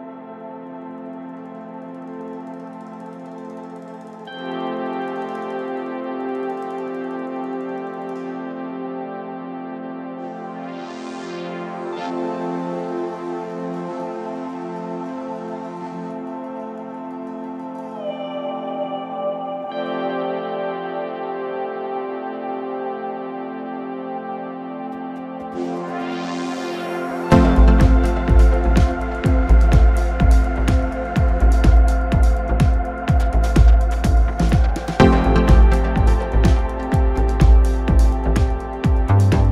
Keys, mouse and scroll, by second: 6.7-7.2 scroll up 4, 7.2 Tab, 7.5-8.3 scroll down 2, 8.3-8.8 scroll down 1, 8.8 Tab, 9.5-10.0 scroll down 3, 10.0-10.4 scroll down 3, 10.4 Tab, 11.9 click, 12.4-13.2 scroll up 1, 13.2 scroll up 2, 24.9 click, 25.7 middle click, 26.0-26.4 scroll up 4, 26.4-30.1 middle drag, 30.1-30.5 drag, 30.5 scroll up 1, 30.6 scroll down 1, 30.8-31.4 middle drag, 31.4 click, 31.9-32.2 right drag, 32.2-33.9 middle drag, 33.9-34.8 drag, 34.8-36.3 middle drag, 36.3-36.7 scroll up 2, 36.7 scroll down 1, 36.9-37.8 middle drag, 37.8 click, 38.3 click, 38.5 middle click, 38.8-39.5 scroll up 2.